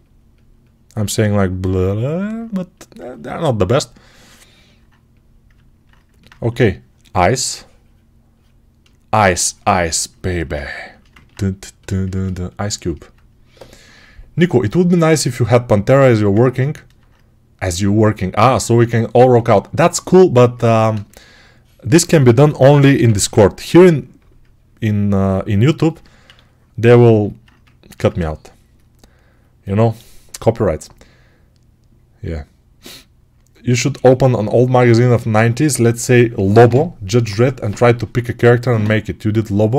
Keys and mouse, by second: 6.3 1, 8.7-27.8 shift+right drag, 22.8 p, 23.0 [, 23.1 [, 26.1 1.